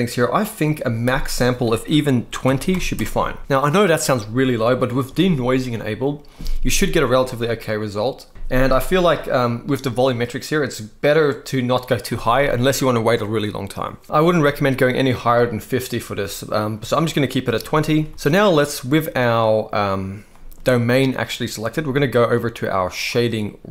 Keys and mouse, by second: 0.8-2.6 drag, 17.3 middle click, 17.8 ctrl+s, 20.0 middle click.